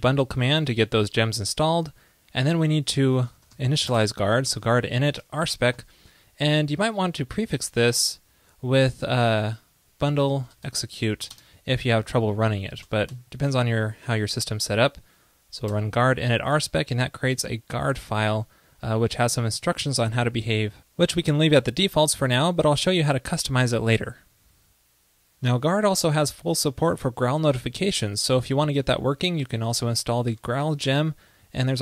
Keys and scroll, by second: 7.7 ctrl+e, 8.5 ctrl+a, 13.0 alt+BackSpace, 13.1 alt+BackSpace.